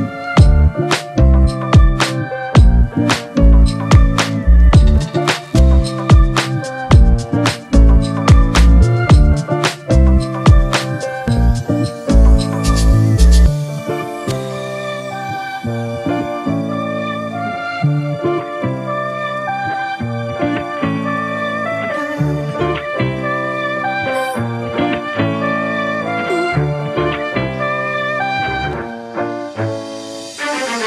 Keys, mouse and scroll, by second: 26.9 double click, 28.8 typing.